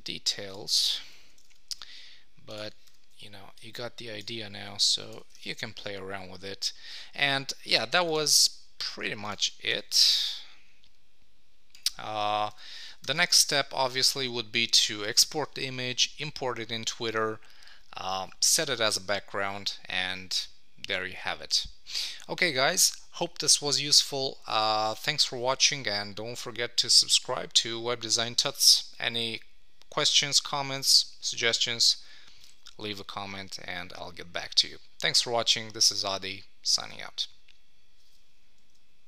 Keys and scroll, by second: 5.1 Down, 5.3 super+s, 12.3 super+s, 13.0 super+;, 13.3 Tab.